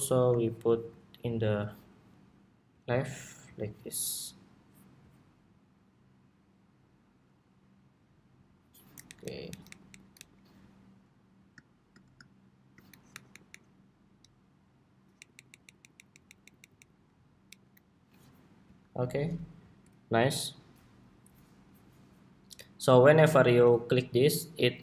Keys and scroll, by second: 19.3 super+s.